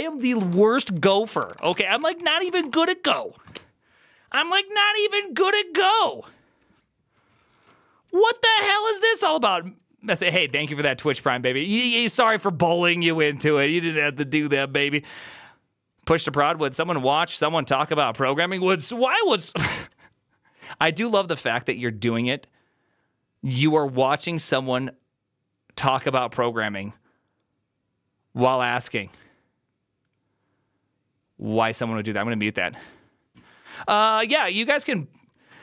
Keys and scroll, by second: 0.0 ctrl+d, 0.3 ctrl+d, 0.6 ctrl+d, 0.8 ctrl+d, 0.9 ctrl+d, 1.0-2.9 typing, 2.0 ctrl+c, 10.4 alt++.